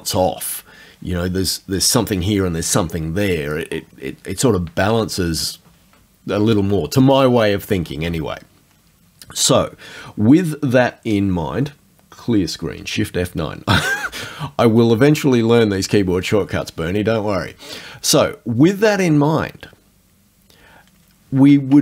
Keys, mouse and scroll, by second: 14.0 shift+F9, 18.9 click, 21.7 alt+Tab.